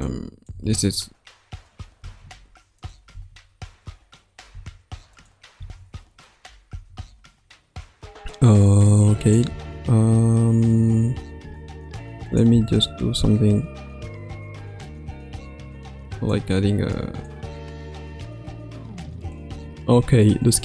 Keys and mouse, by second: 0.0-0.4 drag, 0.5 space, 1.9 space, 2.7 click, 3.1 space, 4.4 space, 5.1 click, 5.5 space, 6.6 space, 8.6-9.3 drag, 9.5 space, 11.4 space, 12.2 click, 12.5 space, 14.5 space, 16.2-17.2 drag, 19.3 space.